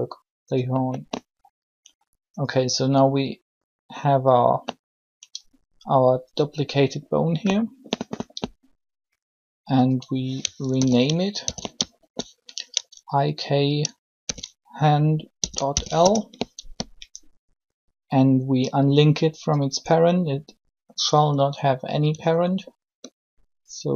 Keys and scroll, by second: 10.7 shift+i, 11.4 shift+k, 14.2 shift+h, 15.1 shift+h, 15.6 shift+l, 16.0 Return.